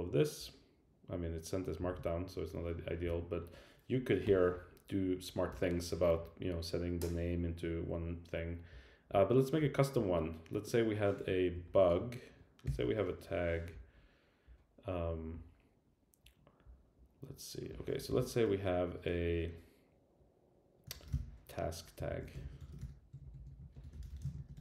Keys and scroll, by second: 11.5 shift+Up, 22.1 shift+super+Left.